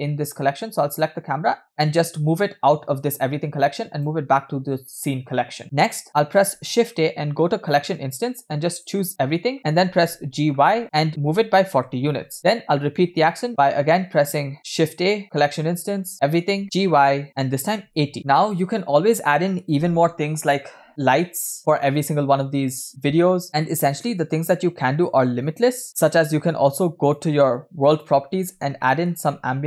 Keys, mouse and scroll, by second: 0.6 click, 1.7 right click, 1.9 click, 2.1-3.1 drag, 6.7 shift+a, 9.9 g, 13.5 ctrl+z, 13.5 shift+r, 13.6-14.3 shift+middle drag, 14.6 shift+a, 16.7 g, 18.1 KP_0, 18.3 click, 23.5-25.9 drag, 26.6 click, 27.0-28.2 drag, 28.5 scroll down 2, 28.8 middle click, 29.3-29.6 scroll down 2.